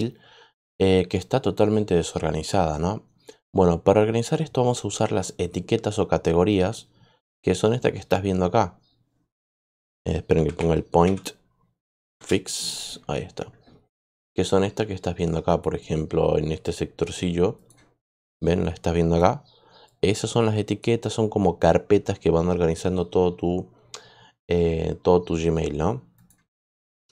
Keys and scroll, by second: 10.0-11.0 typing, 12.1 Return.